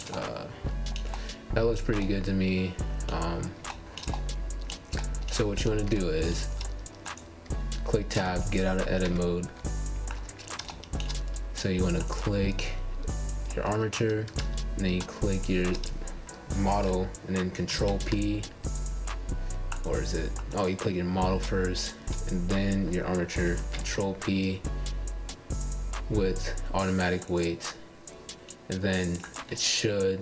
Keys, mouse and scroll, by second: 0.2-1.4 shift+middle drag, 1.4 click, 1.9-4.2 middle drag, 4.2 g, 5.8 middle click, 6.3-7.1 scroll down 4, 7.1 shift+middle click, 7.9 KP_1, 10.3 Tab, 10.7 click, 14.9 click, 17.9 click, 19.6 ctrl+p, 20.5 click, 21.1 click, 21.8 click, 22.7 shift+click, 23.5 ctrl+p, 27.2 click, 28.7 click.